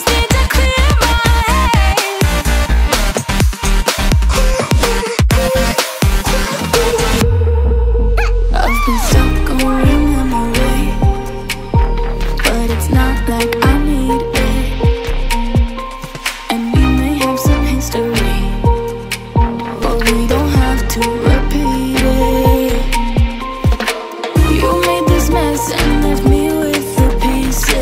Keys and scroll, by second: 6.0 typing, 12.3-14.8 typing, 16.0 typing, 18.5-19.2 typing, 24.2 ctrl+alt+shift+e, 27.0 ctrl+alt+shift+g.